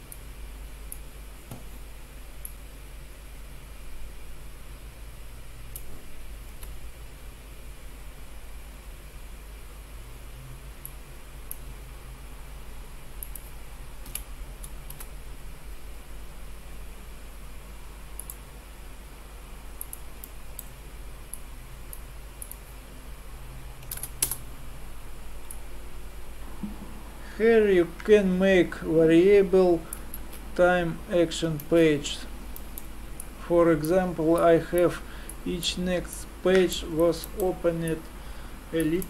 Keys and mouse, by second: 2.6-4.5 drag, 6.5 shift+a, 14.1 Delete, 14.9 shift+a, 21.3-24.6 drag, 25.6-27.4 drag, 30.2 alt+a, 31.6 alt+a, 33.2-35.1 drag, 37.4-39.0 middle drag.